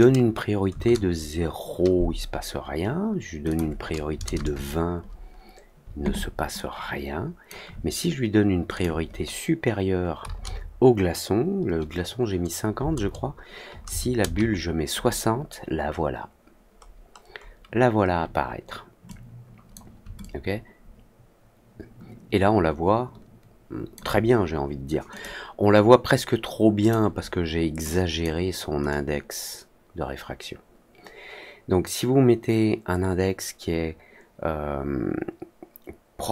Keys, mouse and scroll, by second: 3.4 click, 6.5 alt+click, 8.7 click, 16.8 middle click, 17.4 middle click, 19.0 click, 20.1-23.9 alt+drag, 25.0 click, 26.7 click, 27.8-28.1 drag, 28.8-36.3 drag.